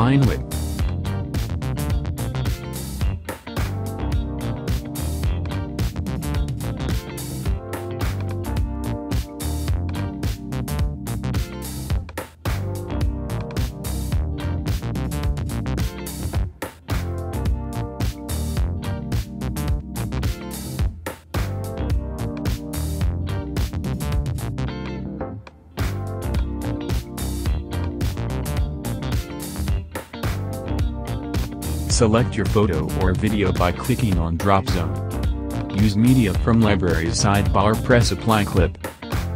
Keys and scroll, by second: 0.0 super+z, 3.7 super+z, 6.5 super+z, 22.6 BackSpace.